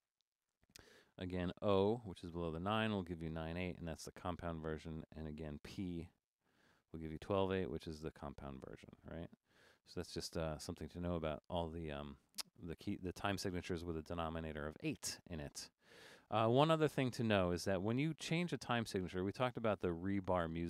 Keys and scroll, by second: 2.0-2.8 typing, 6.0-6.5 typing.